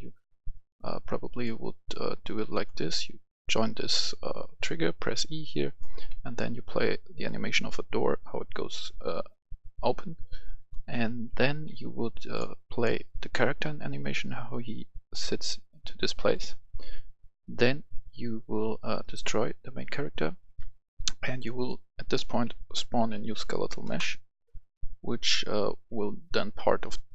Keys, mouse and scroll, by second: 6.1 w, 7.1 click, 9.5 click, 10.7 right click, 10.8 s, 11.3 d, 11.6 w, 16.3 click, 22.1-23.2 typing, 22.7 click, 23.8 Return.